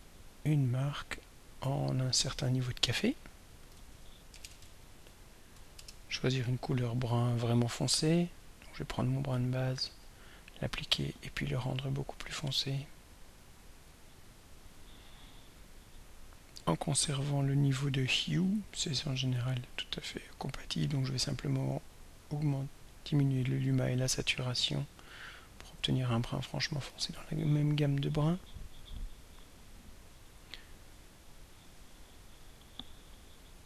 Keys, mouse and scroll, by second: 0.2 click, 1.6 click, 2.2 click, 2.6-3.6 drag, 3.4-6.0 typing, 9.4 click, 11.6 right click, 13.8 drag, 14.6 click, 16.3 click, 19.5-21.0 drag, 22.1-25.0 drag, 27.1 click, 28.8 click.